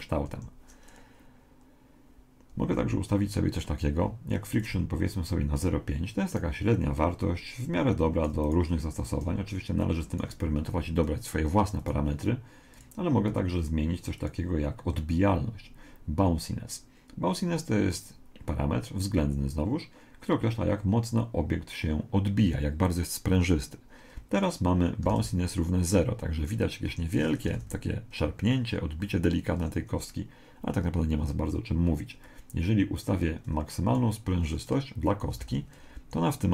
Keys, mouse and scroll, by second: 0.3 Escape, 4.6 click, 6.3 right click, 7.6-10.7 drag, 11.8 right click, 12.7 click, 25.1 alt+a, 26.9 Escape, 27.5 alt+a, 29.5 Escape, 32.3 click, 35.4 alt+a.